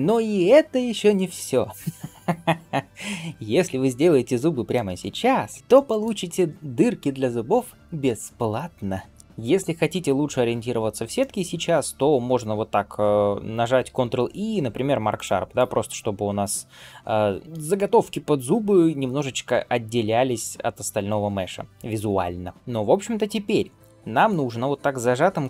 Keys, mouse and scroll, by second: 3.0 KP_7, 4.2 shift+middle click, 5.6 shift+middle click, 5.6 scroll up 1, 10.5 scroll down 1, 11.0 shift+middle click, 13.7 ctrl+e, 15.4 click, 16.2 scroll up 2, 17.3 scroll down 2, 17.4 shift+middle click, 23.1 scroll up 1, 23.4 2.